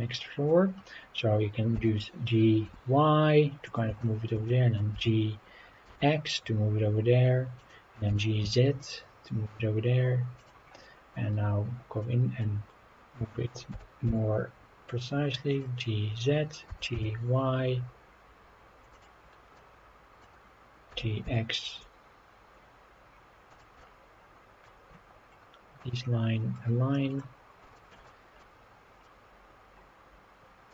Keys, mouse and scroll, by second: 0.2-0.5 middle drag, 1.7 g, 2.6 y, 3.6 click, 4.0 shift+middle click, 4.5-4.8 middle drag, 4.9 g, 5.9 x, 7.6 click, 8.1 g, 8.4 z, 10.4 click, 10.7-11.7 scroll up 6, 12.0-12.4 middle drag, 13.7 g, 14.0 z, 15.5-16.7 drag, 16.7 g, 16.9 y, 18.9 click, 19.2 scroll down 2, 19.5-20.2 middle drag, 20.9 g, 21.2 x, 23.5 click, 23.8-24.6 middle drag, 25.0-25.5 scroll up 4, 26.5-26.9 scroll down 2, 26.9-27.2 middle drag, 27.2 scroll up 1, 27.3 scroll down 2, 27.7 shift+middle click, 28.1-28.4 middle drag, 28.6-29.0 scroll up 2, 29.0-30.7 middle drag.